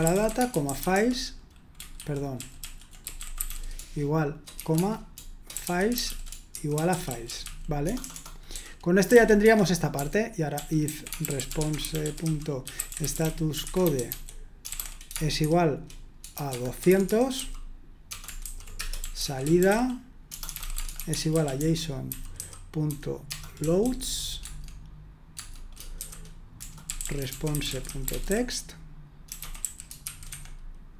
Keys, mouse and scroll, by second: 0.0-30.3 typing.